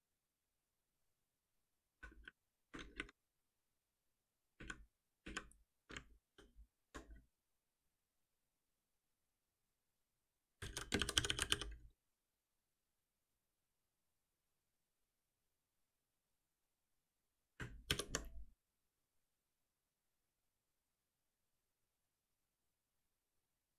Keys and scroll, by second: 4.3 ctrl+w, 6.2 ctrl+alt+shift+t, 9.4 ctrl+alt+shift+p, 15.4 ctrl+s, 17.9 shift+F10.